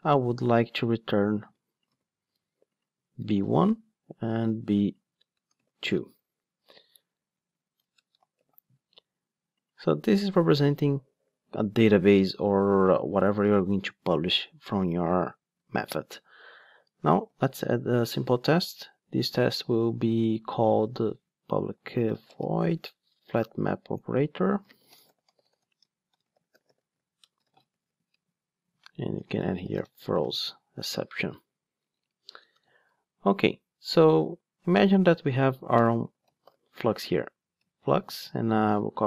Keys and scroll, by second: 1.4 super+c, 1.9 super+v, 18.1 Return, 23.7 Return, 30.8 Return, 37.3 Return.